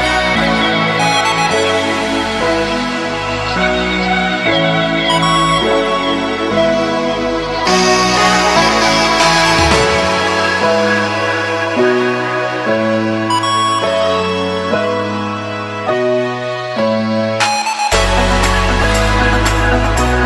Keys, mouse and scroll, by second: 1.9-4.3 typing, 4.3 Return, 5.5 click, 6.3-8.6 typing, 10.3 Return, 11.5 click, 12.5 F11, 12.5 F10, 14.1 click, 16.7 F2, 17.9 click, 18.2 F2, 19.1 typing, 19.2 Return, 20.0 click.